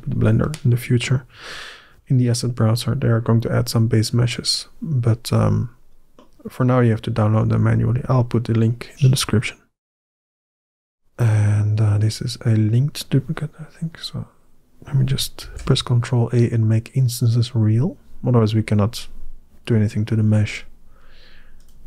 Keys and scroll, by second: 15.3 ctrl+a.